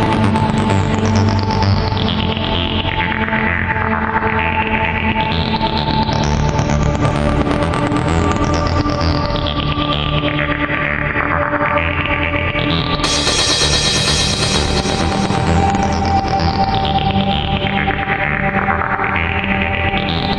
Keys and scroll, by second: 2.9 ctrl+z.